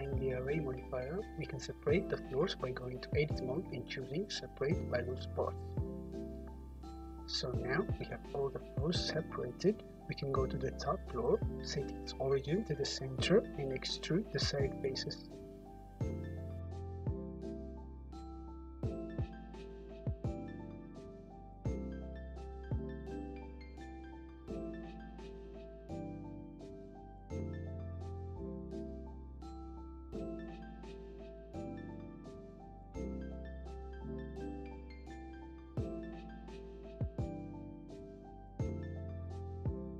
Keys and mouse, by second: 0.8 Tab, 1.9 a, 3.2 p, 5.4 Tab, 8.4 click, 12.9-15.3 right drag, 15.3-16.6 middle drag, 16.6 click, 16.6 middle click, 16.8 drag, 18.1 Tab, 19.9 3, 20.7 `, 21.0-23.3 drag, 21.7 `, 23.3 alt+middle click, 23.4-26.3 alt+drag, 26.3-39.9 middle drag.